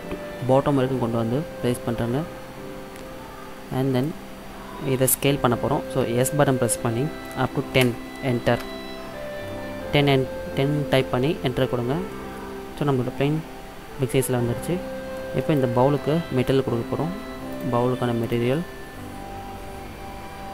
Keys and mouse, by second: 6.1 s, 9.6-12.3 middle drag, 12.3 click, 12.4-13.5 middle drag, 15.6-17.7 middle drag, 17.7-20.2 drag.